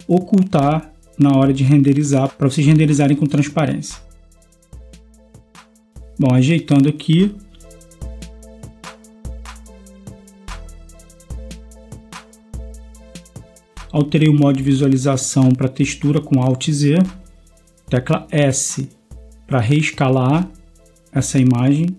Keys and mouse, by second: 4.3 g, 7.4 s, 10.9 g, 13.8 alt+z, 17.1 g, 19.5 s.